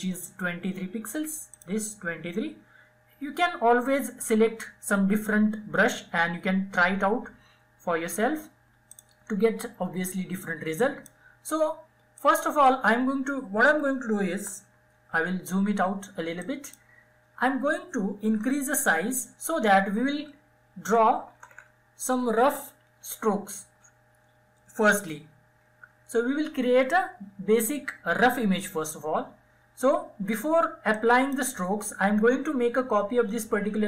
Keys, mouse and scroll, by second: 0.2 click, 7.6-13.8 drag, 13.8 ctrl+-, 15.1-17.2 drag, 17.2-20.2 typing, 23.8-24.3 typing, 29.6-32.4 drag.